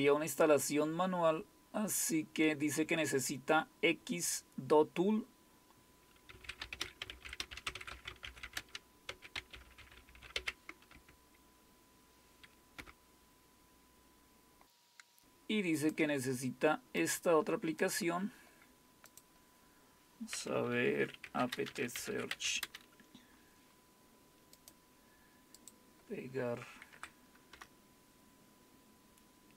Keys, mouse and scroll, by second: 0.0-5.7 scroll down 1, 5.7 scroll down 1, 6.7-11.4 typing, 15.2 click, 17.0 right click, 17.8 click, 19.1 click, 21.5-23.0 typing, 24.6-25.6 right drag, 25.6 click, 26.9 Right, 27.5 Return.